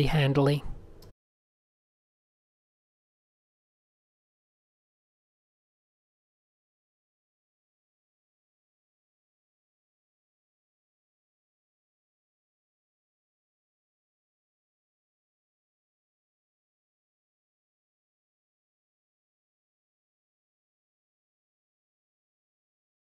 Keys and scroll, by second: 0.7 super+a, 0.9 alt+shift+super+r, 5.6 super+h, 6.4 shift+super+a, 6.4-8.5 typing, 11.1 shift+super+a, 13.0-14.3 typing, 13.2 alt+shift+super+g, 17.6 super+z, 19.6 super+z, 20.2-21.5 typing, 22.0 super+z.